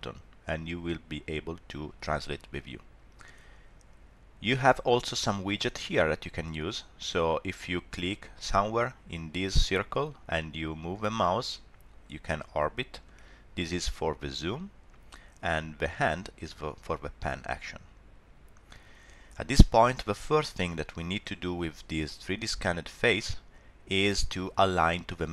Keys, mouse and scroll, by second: 10.3 click, 13.7 click, 15.6 click, 22.0 middle click.